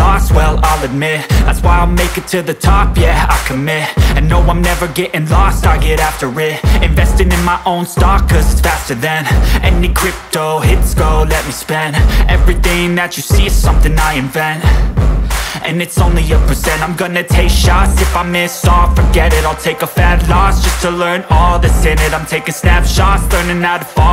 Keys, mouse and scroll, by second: 0.5 scroll down 1, 2.6 click, 3.1-4.5 scroll up 1, 4.5 click, 10.3 scroll up 1, 10.7 ctrl+space, 11.6 click, 18.0 scroll down 1, 18.3 ctrl+space, 19.4-19.8 scroll up 1, 19.8 space, 20.4-23.0 drag, 23.5-24.1 scroll down 1.